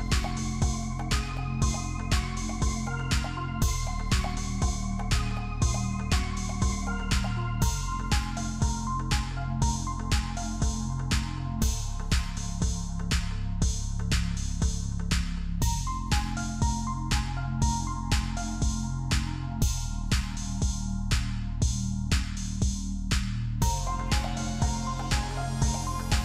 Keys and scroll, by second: 15.4 typing, 17.2 ctrl+=.